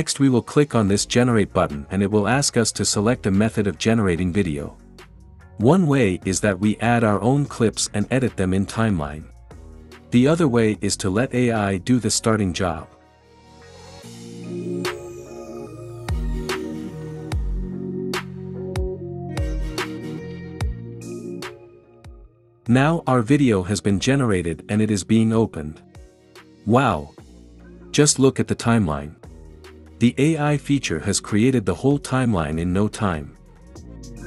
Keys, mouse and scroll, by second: 0.8-1.9 drag, 13.9 click.